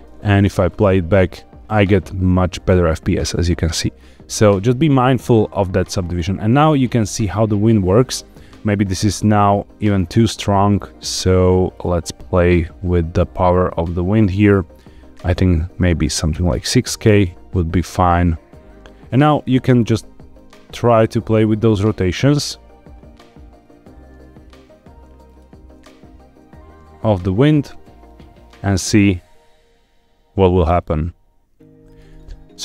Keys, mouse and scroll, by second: 0.4 space, 3.1 scroll up 2, 9.8 click, 11.7 click, 13.5 click, 14.6-16.3 drag, 15.8 KP_0, 16.0 KP_0, 19.6 r, 25.2 click, 26.0 r, 28.2 r, 31.8 click, 32.2-32.6 shift+middle drag.